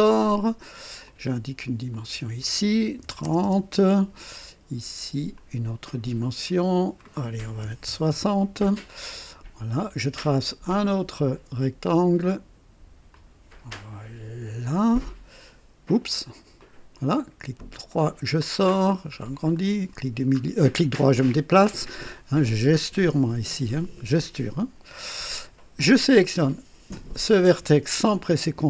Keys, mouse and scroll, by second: 1.0 click, 1.9 click, 3.0 KP_3, 3.2 KP_0, 3.4 Return, 5.3 click, 6.4 click, 7.6 KP_6, 7.8 KP_0, 8.1 Return, 9.1 scroll up 1, 10.6 click, 13.1-15.2 drag, 13.6 typing, 16.5 click, 16.8-19.6 typing, 17.9 right click, 18.7-19.2 scroll up 1, 19.5 middle drag, 19.6 scroll down 1, 20.7-21.8 right drag, 20.9 typing, 22.9-23.9 typing, 27.2 click.